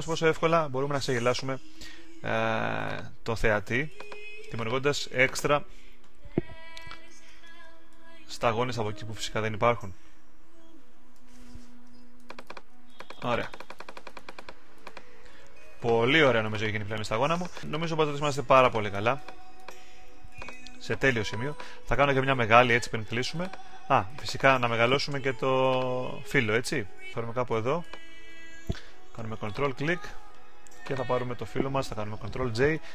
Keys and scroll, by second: 17.5 super+d, 32.5 super+j.